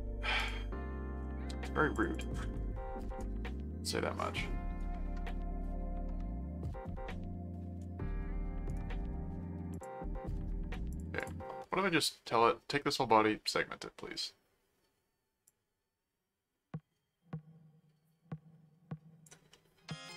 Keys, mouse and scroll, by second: 0.3 click, 1.2 middle click, 2.0 click, 2.5 right click, 3.2-6.7 middle drag, 8.7 right click, 9.7 click, 10.9 click, 12.3-14.0 middle drag, 15.5-19.2 drag, 19.5-20.1 middle drag.